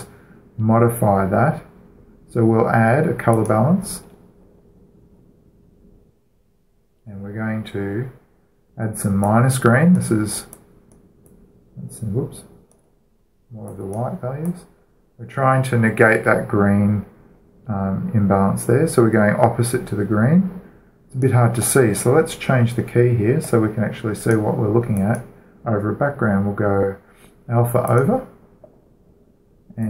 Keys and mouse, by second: 0.5 click, 4.2-5.9 drag, 5.9-8.0 middle drag, 10.0-17.1 drag, 22.0-23.9 drag, 24.2-27.6 drag, 28.7-29.8 drag.